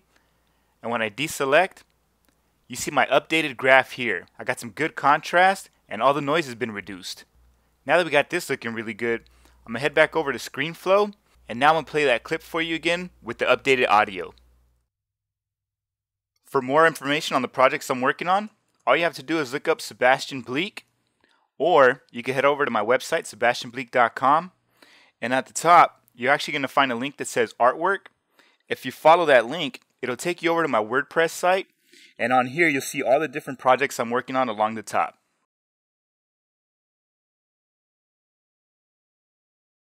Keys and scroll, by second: 9.8 super+Tab.